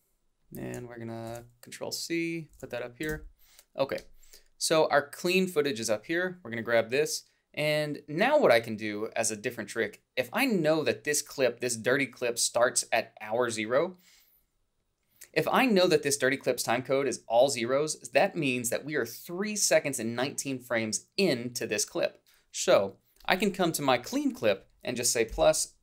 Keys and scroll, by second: 1.3 ctrl+c.